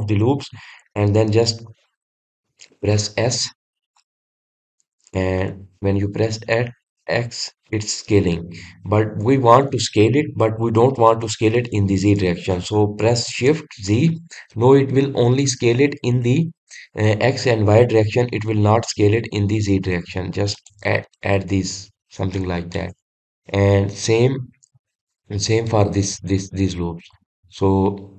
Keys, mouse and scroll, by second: 2.8-6.0 middle drag, 22.1 shift+z, 22.6 click, 23.2 scroll down 1, 23.8-28.1 middle drag.